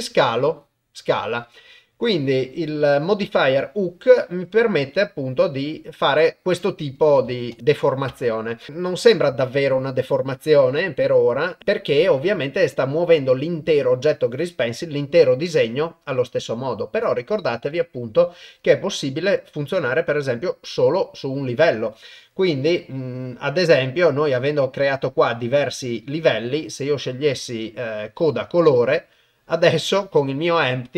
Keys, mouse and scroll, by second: 6.8-8.1 drag, 17.7 click, 19.7-28.5 drag.